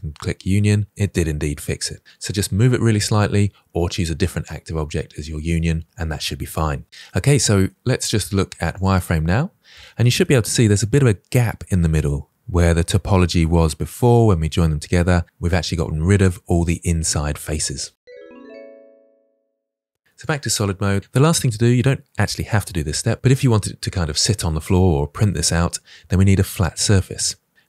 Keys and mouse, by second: 0.9-3.5 middle drag, 7.0-7.4 middle drag, 9.0 shift+middle drag, 9.2-16.0 middle drag, 14.0-15.1 drag, 20.1-20.8 drag, 21.1-21.6 middle drag.